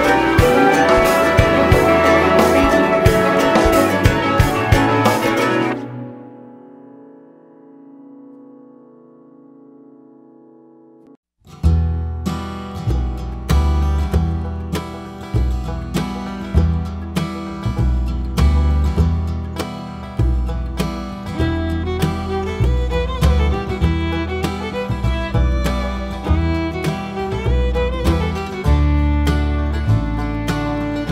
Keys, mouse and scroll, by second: 0.0 click, 0.2 scroll down 1, 0.8 scroll up 1, 0.8 `, 1.5 KP_7, 3.2 scroll down 1, 3.8 click, 5.4 shift+click, 6.1 ctrl+j, 7.0 click, 7.8 shift+click, 8.2 ctrl+j, 8.9 click, 9.0 Tab, 10.8 click, 11.2 Tab, 12.8 click, 15.1 shift+d, 15.9-18.0 drag, 17.6 h, 18.2 Tab, 20.1 shift+click, 20.6 ctrl+j, 21.4 click, 21.6 Tab, 23.0 shift+d, 24.4-25.4 drag, 26.0 ctrl+j, 26.8 click, 27.0 x, 28.0 alt+a, 28.0 click, 29.3 shift+d, 29.6 right click, 30.0 shift+click, 30.4 click, 31.0 Tab.